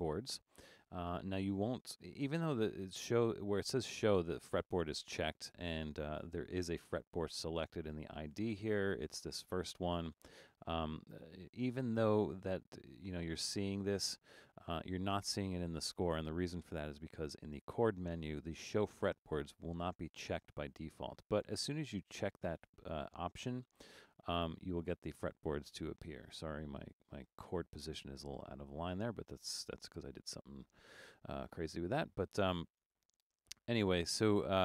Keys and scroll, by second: 29.4 super+z.